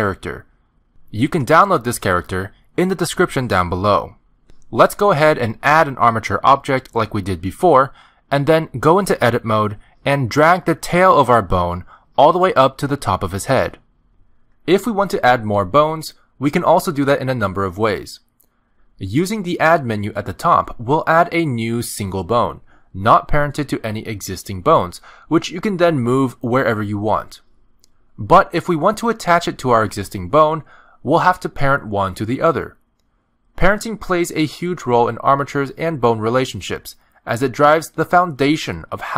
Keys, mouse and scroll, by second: 6.5 click, 10.0 Tab, 10.8 click, 11.8 g, 15.3 middle click, 19.1 click, 19.8 g, 22.3 middle click, 24.0 click, 25.8 click, 26.4 g, 27.4 middle click, 28.0 g, 28.7 middle click, 29.4 z, 30.2 middle click, 31.0 shift+middle click, 32.0 shift+click, 33.4 middle click, 34.5 shift+middle click, 34.7 scroll down 1, 34.8 middle click.